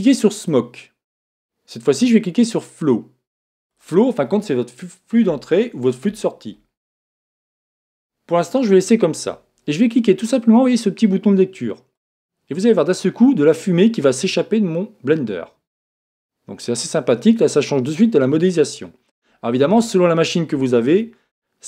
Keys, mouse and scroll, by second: 0.4 click, 3.7 click, 11.9 click, 18.9 click.